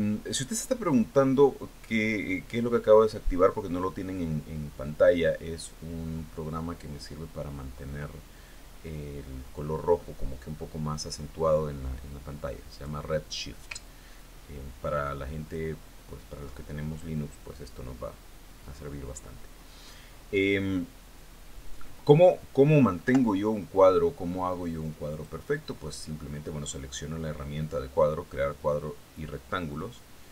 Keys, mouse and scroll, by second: 14.2 click, 15.3-17.2 ctrl+drag, 24.6 Delete, 26.6 click.